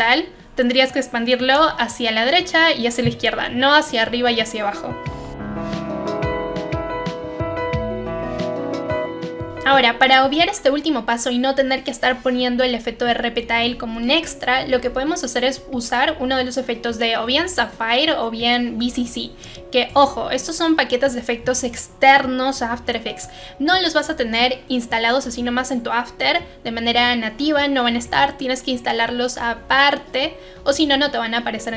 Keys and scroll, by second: 5.2 Delete, 9.4 Delete.